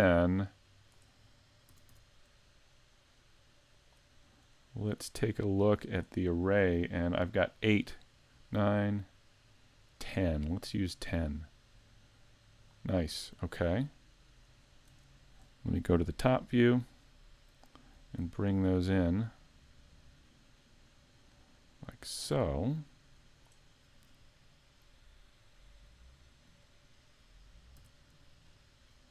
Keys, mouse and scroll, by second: 1.7 s, 4.9 click, 7.7 click, 9.2 click, 11.3 click, 13.0-13.6 scroll down 1, 13.6 middle click, 14.6 scroll down 3, 15.1 shift+middle click, 16.2 KP_7, 17.6 shift+middle click, 19.3 click, 25.4 middle click, 27.8 z, 28.5 scroll up 4, 28.9 middle click.